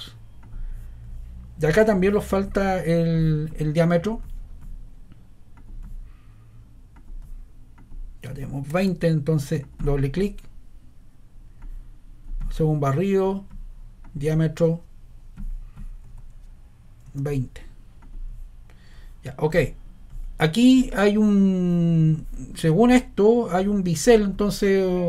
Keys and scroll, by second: 8.6 ⟲, 16.0 shift+2, 17.0 0.